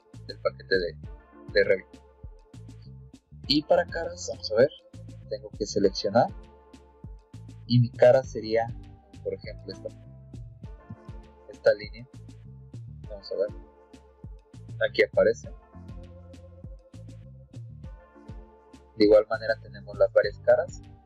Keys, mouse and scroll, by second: 0.8 click, 5.6 click, 6.7 click, 9.6 click, 12.3 middle click, 13.3 click, 13.7-14.3 scroll down 2, 14.7 middle click, 16.4 click, 19.6 click, 20.8 click.